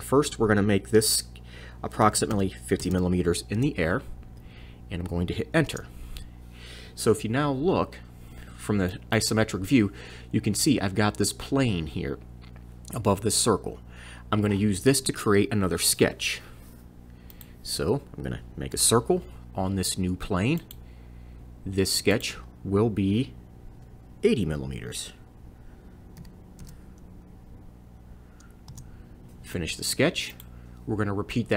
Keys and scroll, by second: 1.8-3.3 typing, 5.7 Return, 18.8 c, 26.2 8, 26.6 o, 28.7 Return.